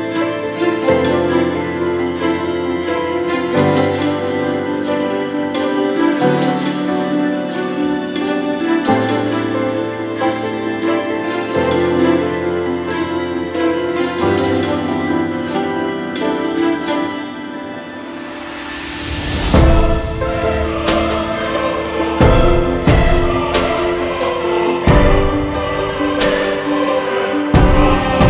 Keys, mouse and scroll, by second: 2.4-8.1 drag, 9.2-12.3 drag, 12.3 scroll down 1, 12.9-15.5 drag, 15.5 Tab, 15.6 middle click, 15.8 a, 16.4 click, 17.0-17.5 scroll down 2, 17.3 alt+z, 17.5 middle click, 17.7 click, 17.9 alt+z, 18.4 click, 18.6 Tab, 19.2 click, 19.8 click, 20.6 scroll up 7, 20.9-25.7 middle drag, 24.2-26.5 drag, 26.5 space, 28.1 space.